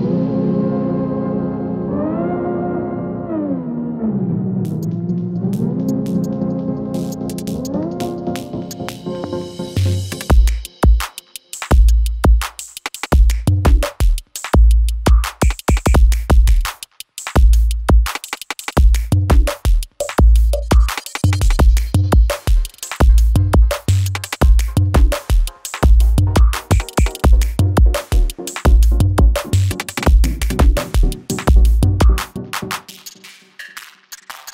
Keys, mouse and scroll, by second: 0.9 shift+w, 1.4 shift+e, 2.5-3.3 typing, 3.6 ctrl+a, 5.3 click, 12.3 click, 16.2-18.0 scroll down 1, 18.0 click, 19.9-24.0 scroll up 1, 24.3 click, 27.7 ctrl+alt+Home, 29.2 click, 31.5 s, 32.3-33.8 drag.